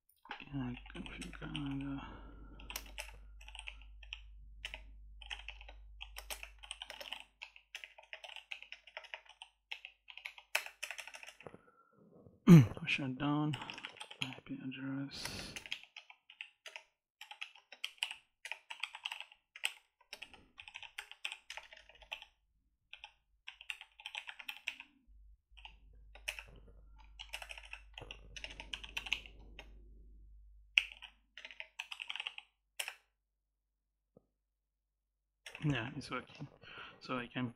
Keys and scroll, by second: 0.3-9.1 typing, 2.8 Return, 6.1 Return, 7.2 Tab, 9.5 Tab, 10.4 Return, 13.1-25.8 typing, 15.5 Tab, 17.2 Tab, 26.1 Return, 27.0 ctrl+z, 27.1 Return, 27.8-29.3 typing, 30.3-32.4 typing, 32.6 Return, 35.3 Return.